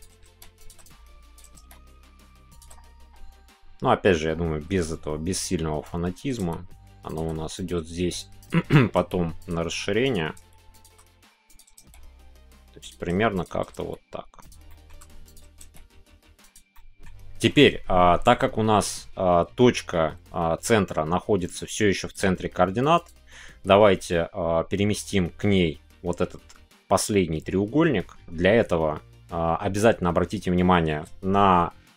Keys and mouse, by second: 0.2 g, 0.9 click, 1.5 g, 5.8 click, 7.1 click, 7.6-8.9 drag, 8.9 g, 9.4 shift+click, 10.3 g, 10.7 shift+click, 11.8 shift+g, 12.8 click, 13.7 shift+g, 14.4 click, 14.6 middle click, 15.5 g, 16.4 click, 16.7 middle click.